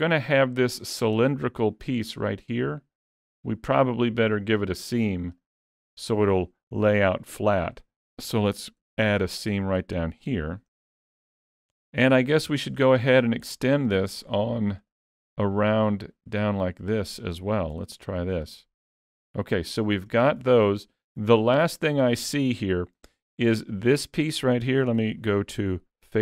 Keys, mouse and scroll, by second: 0.5 middle click, 2.3 middle click, 3.4 middle click, 5.3 click, 8.8 ctrl+e, 10.4 alt+a, 10.7 middle click, 12.5 shift+middle click, 12.8-13.5 scroll up 1, 13.5 click, 14.2 shift+click, 16.5 shift+click, 16.6 shift+click, 17.8 ctrl+e, 19.0 alt+a, 19.4 middle click, 22.7 middle click, 25.0 3.